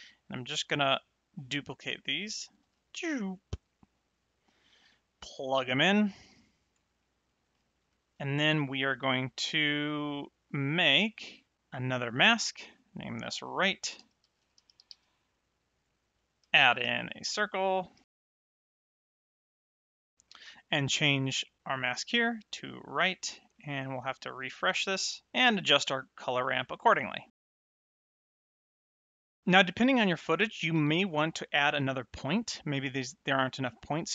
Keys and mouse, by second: 2.5 shift+d, 3.3 click, 5.7 click, 7.0 middle click, 7.9 ctrl+shift+click, 11.3 middle click, 11.8 click, 13.4-14.8 typing, 16.4 shift+a, 17.0 click, 18.0 g, 18.2 click, 18.8 click, 19.3 middle click, 19.6 click, 19.8 click, 20.2 middle click, 21.6 click, 23.5 middle click, 24.7 click, 25.5 middle click, 27.3 click, 29.1 middle click, 29.4 click.